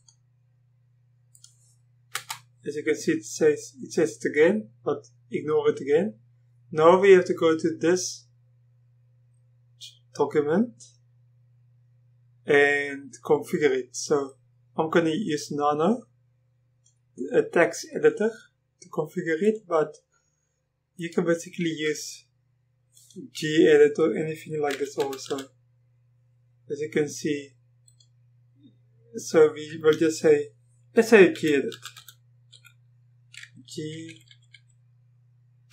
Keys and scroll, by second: 2.2 Return, 24.5-25.8 typing, 31.4 g, 32.6 typing, 34.1 typing.